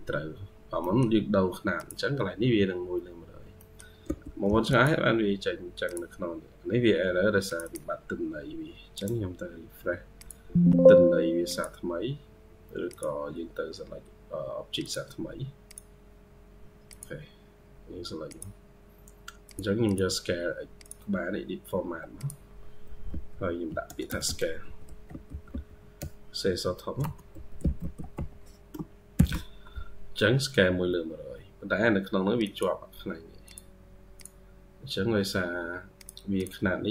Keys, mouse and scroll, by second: 0.7 middle click, 2.8-3.4 scroll up 1, 3.4 middle click, 3.9 typing, 6.1 scroll up 1, 6.7-7.4 typing, 7.5 double click, 8.8 right click, 19.7 double click, 24.1-29.0 typing, 26.9 Caps_Lock, 36.2 double click.